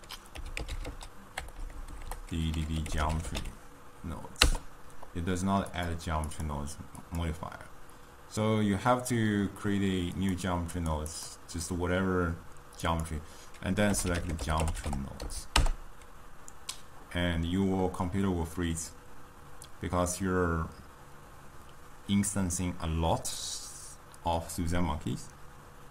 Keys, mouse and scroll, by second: 11.2-25.9 drag.